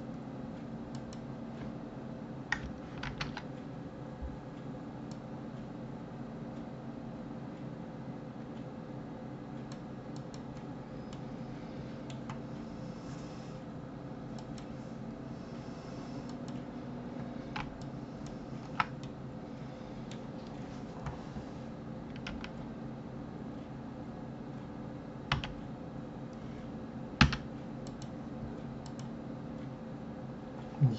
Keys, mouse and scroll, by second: 0.9 click, 3.0 ctrl+r, 11.1-14.1 middle drag, 14.4 click, 16.3 click, 17.8 alt+click, 19.0-22.0 middle drag, 22.3 r, 27.8 click, 28.8 click.